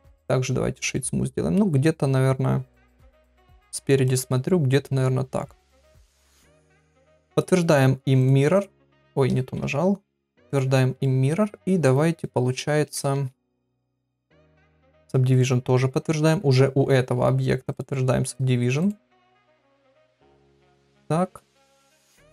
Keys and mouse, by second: 0.9 middle click, 3.2 KP_1, 8.3 click, 9.4 ctrl+z, 10.1 click, 11.0 middle click, 13.1 Tab, 13.9 Tab, 15.4 click, 17.8 click, 18.9 right click, 20.4 Tab, 21.0 Tab, 21.9 Tab.